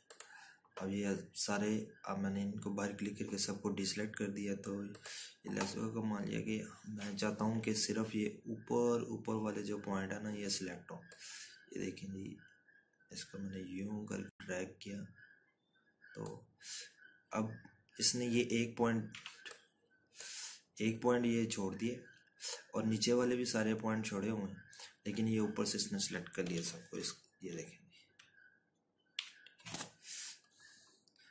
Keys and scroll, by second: 21.5 z, 28.8 ctrl+-, 29.9 Right.